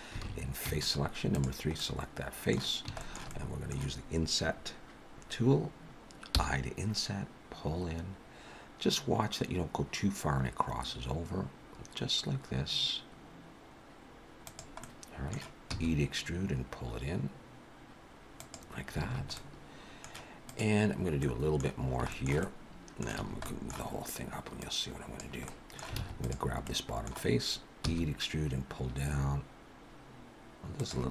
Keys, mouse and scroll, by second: 0.2 alt+a, 0.6 3, 1.3 click, 1.8 middle click, 3.0 shift+middle click, 3.3 middle click, 14.8 middle click, 15.7 e, 19.1 alt+a, 19.4 middle click, 20.5 click, 21.2 middle click, 21.8 scroll down 1, 22.1 shift+middle click, 22.4 middle click, 23.1 a, 23.4 middle click, 24.6 click, 25.5 middle click, 26.0 alt+a, 26.2 click, 26.7 middle click, 27.8 e.